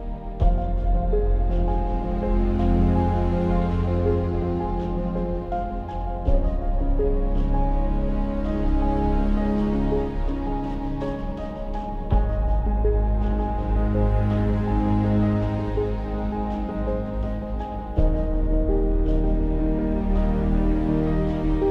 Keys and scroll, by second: 7.5 Up, 7.7 Up, 8.1 Up.